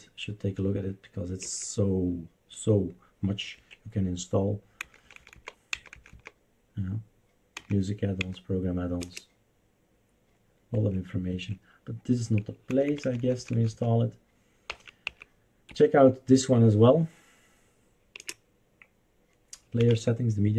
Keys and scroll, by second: 1.4 Return, 3.5 Escape, 4.9 Down, 5.0 Down, 5.1 Down, 5.3 Down, 5.7 Down, 5.9 Down, 6.1 Down, 7.6 Page_Down, 7.8 Down, 8.2 Down, 9.0 Return, 10.7 Escape, 11.3 Escape, 12.7 Page_Down, 12.9 Down, 13.0 Down, 13.2 Down, 13.3 Down, 13.5 Down, 13.7 Down, 14.7 Up, 15.0 Up, 15.6 Right, 18.2 Return, 19.8 Down.